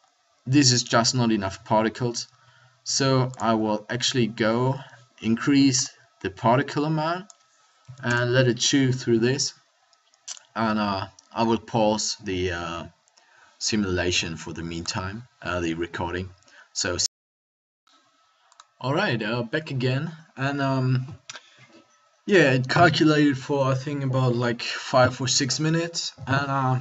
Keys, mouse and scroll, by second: 1.5-2.7 middle drag, 3.9-8.2 drag, 10.2-17.3 drag.